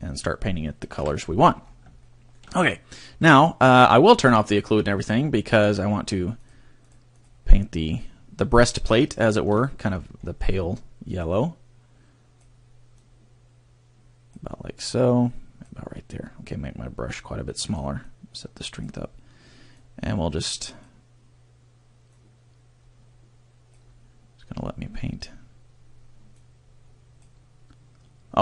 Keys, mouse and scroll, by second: 0.9 KP_3, 1.6-2.0 scroll up 3, 2.0 shift+middle click, 2.2 shift+middle click, 4.2 scroll down 1, 4.7-5.6 scroll down 10, 6.3 click, 6.8 click, 7.1 click, 9.1 shift+middle click, 9.8-10.7 scroll up 11, 11.3 click, 12.9 click, 14.9 click, 17.1 click, 18.0 click, 19.9 click, 22.3 click, 26.4 click.